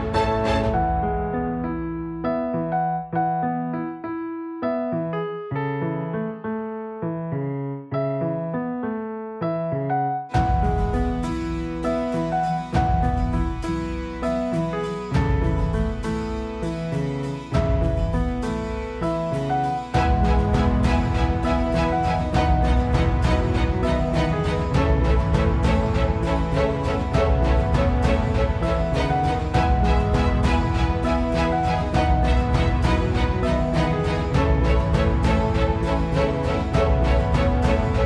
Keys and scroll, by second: 0.1 ctrl+space.